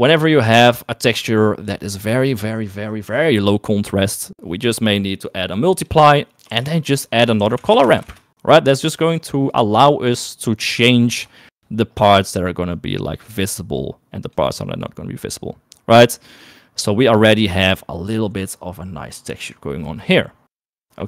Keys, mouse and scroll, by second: 0.6 middle click, 1.1 click, 1.4 click, 6.0 click, 6.9 shift+a, 8.0 r, 9.6 click, 11.6 shift+middle click, 13.0 click, 13.8 click, 15.2-19.7 drag.